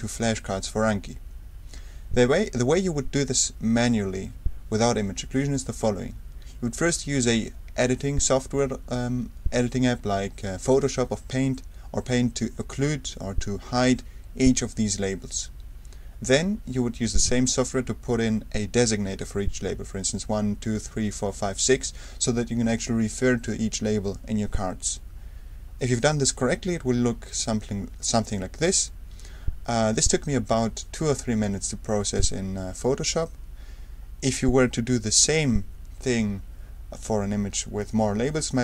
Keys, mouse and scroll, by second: 26.9 Right.